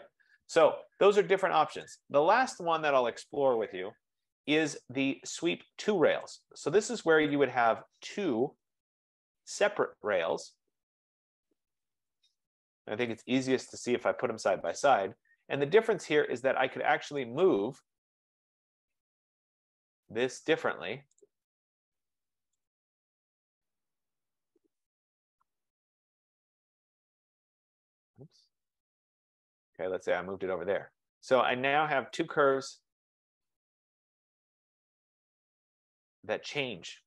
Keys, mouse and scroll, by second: 1.0 scroll, 2.0 click, 3.5 Escape, 5.4 F15, 6.3 scroll, 7.4 click, 8.5-9.5 typing, 10.6-11.4 scroll down 7, 11.7 scroll, 11.7 typing, 12.3 click, 13.3 click, 13.7 typing, 14.6 Escape, 15.0 Escape, 17.3 click, 19.0 click, 20.2 shift+click, 21.4 shift+click, 22.8 click, 23.4-24.4 typing, 25.3 click, 27.0 typing, 27.2 click, 30.4-30.8 scroll, 31.8 right click, 32.2 Escape, 32.4 Escape, 33.4 scroll.